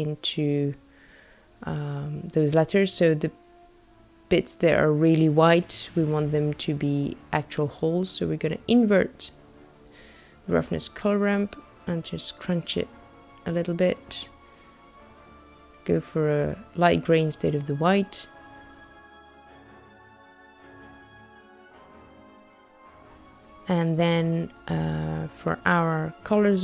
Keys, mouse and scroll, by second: 0.3 middle click, 3.6 click, 4.7 click, 7.3 click, 8.5 click, 11.3 click, 16.2 click, 18.0 click.